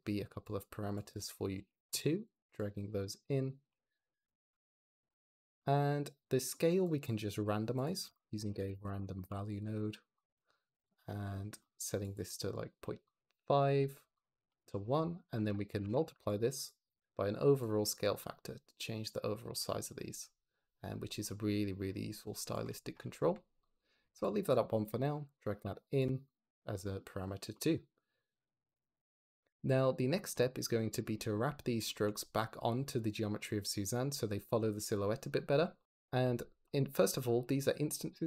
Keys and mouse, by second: 3.0 drag, 4.7 click, 5.0 click, 7.2 g, 7.7 click, 8.0 shift+a, 9.7 click, 11.0 click, 11.9 click, 12.2 click, 12.4 click, 13.0 click, 14.4 click, 16.5 click, 17.5-22.5 shift+drag, 23.8 click, 24.4 click, 26.1 click, 28.1 click, 28.4 click, 30.2 click, 31.7 shift+middle click.